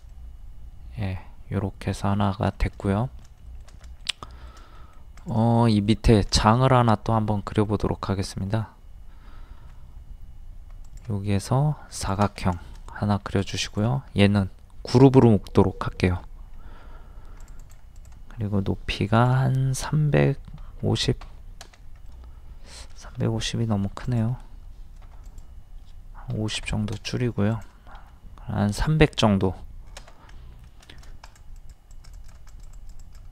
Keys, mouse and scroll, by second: 2.1-2.5 scroll down 1, 2.8 shift+middle click, 3.4 shift+middle click, 4.8 middle click, 5.0 scroll up 1, 5.2 click, 5.7 middle click, 6.8 scroll up 1, 7.5 middle click, 7.9-8.5 scroll up 1, 10.8 click, 12.6 shift+middle click, 13.4 click, 16.1 a, 16.5 scroll up 1, 17.4 click, 18.9 typing, 20.3 KP_3, 22.1 middle click, 24.1 click, 25.1 typing, 26.3 KP_5, 27.5 click, 30.3 middle click, 30.9 shift+middle click, 31.3-33.3 drag.